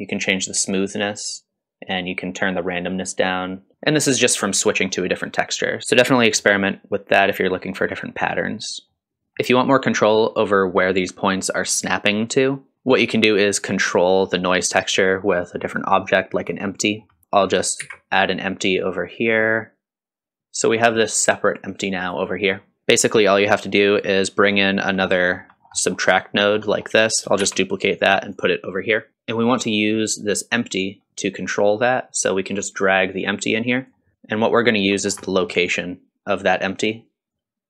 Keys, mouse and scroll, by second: 2.1-3.7 drag, 3.7 middle click, 9.0-9.4 scroll down 1, 9.4 middle click, 12.7 middle click, 12.7 click, 12.7 scroll up 1, 12.9-13.2 scroll down 1, 16.9 scroll down 1, 17.2 click, 17.2 middle click, 17.8 shift+a, 20.4 middle click, 20.4-20.8 scroll up 2, 20.4 space, 20.8-22.2 drag, 22.4 scroll down 1, 22.8 ctrl+x, 22.8 shift+d, 23.9 click, 25.0-25.6 scroll up 3, 25.2 middle click, 25.8 middle click, 26.4 scroll down 2, 26.6 middle click, 27.4 shift+d, 32.5-33.9 drag, 34.1 middle click, 34.1 scroll down 1, 34.2 click, 35.0 scroll up 2, 35.2 middle click, 36.3 scroll up 2, 36.7 middle click, 37.3-37.6 drag.